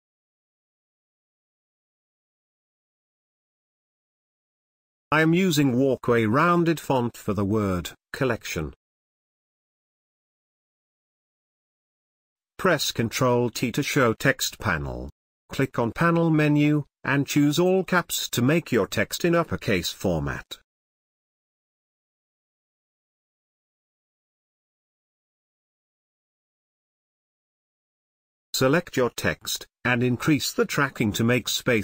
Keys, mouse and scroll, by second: 11.1 click, 13.1 ctrl+t, 16.9 click, 21.8 space, 21.9-24.9 ctrl+drag, 24.9 ctrl+space, 25.0 ctrl+click, 26.3 ctrl+t, 29.2 click, 29.6-30.8 scroll up 1.